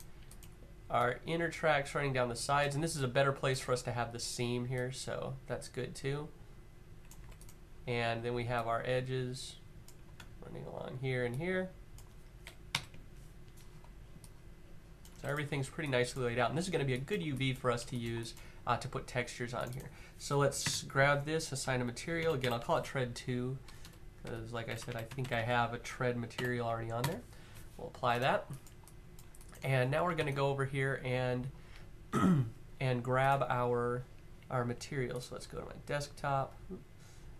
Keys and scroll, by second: 6.8 q, 9.9 q, 12.4 Up, 14.8 q, 20.3 m, 21.9-24.9 typing, 26.1 typing, 27.8 q, 29.9 Tab.